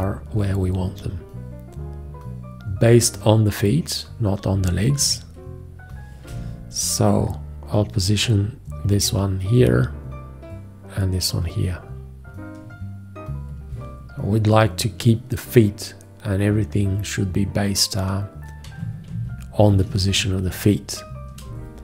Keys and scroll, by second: 5.3 w, 7.5 v, 19.3 ctrl+a, 21.7 space.